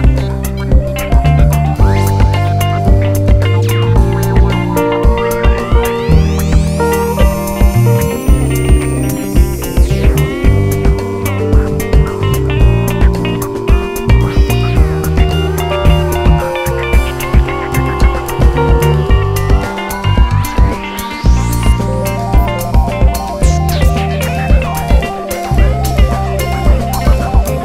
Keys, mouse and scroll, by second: 0.0 click, 0.3 ctrl+x, 0.6 2, 0.8 click, 1.4 click, 2.3 f, 2.5 click, 2.7 shift+click, 2.9 f, 3.3 1, 3.5 click, 3.7 shift+click, 5.6 click, 5.7 ctrl+x, 5.9 2, 6.1 click, 6.3 shift+click, 6.4 f, 6.7 1, 6.9 click, 7.5 shift+click, 8.4 2, 8.6 click, 9.0 f, 9.5 click, 9.7 shift+click, 10.3 g, 11.1 click, 11.5 shift+click, 11.6 f, 11.9 Tab, 12.7 Tab, 13.0 click, 13.3 f, 13.7 click, 15.0 click, 15.3 g, 15.7 click, 16.5 g, 17.4 click, 17.8 f, 18.0 click, 18.5 shift+click, 18.7 f, 18.9 1, 19.1 click, 19.3 g, 19.9 alt+a, 21.2 2, 21.3 click, 21.5 shift+click, 21.8 `, 22.1-22.4 scroll down 1, 22.5 `, 23.2 click, 25.1-26.5 drag, 26.5 `.